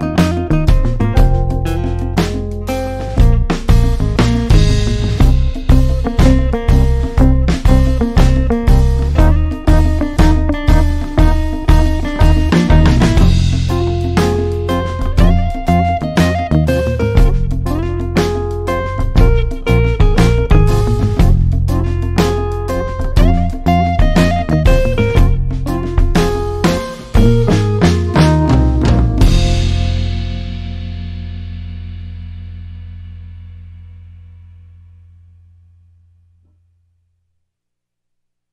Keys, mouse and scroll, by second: 25.3-28.8 scroll down 1, 28.8 alt+scroll down 1, 31.1-38.5 drag.